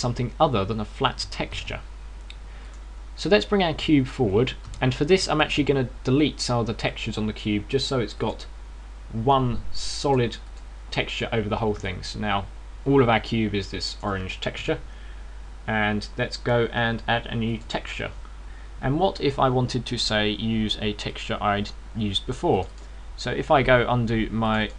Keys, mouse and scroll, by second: 0.5 g, 3.6 click, 4.1 right click, 5.5 g, 7.8 click, 9.0 click, 11.0 click, 11.3 click, 12.7 middle click, 15.4 KP_0, 18.3 click.